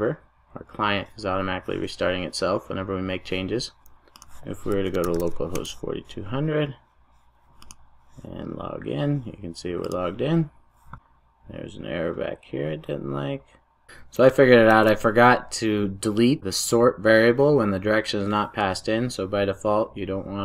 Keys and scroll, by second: 13.8 super+z, 14.7 super+v.